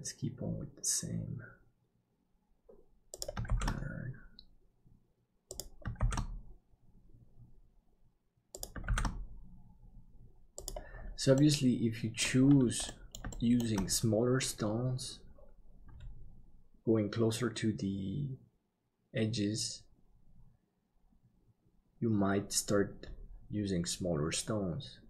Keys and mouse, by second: 3.5 shift+d, 11.4 middle click, 12.9 middle click, 13.3 shift+middle click.